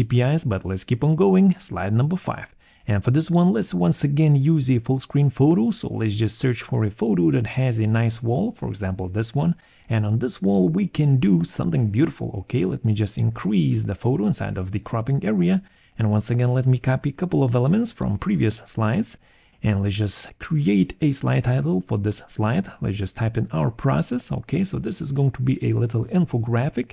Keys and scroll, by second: 0.8 Return, 2.6 alt+2, 4.6-5.6 typing, 10.9 alt+6, 13.7 alt+3, 17.2 ctrl+c, 17.4 ctrl+v, 21.8 6, 22.1 0, 22.2 Return, 23.6-24.5 typing, 25.1 Return, 26.1 BackSpace.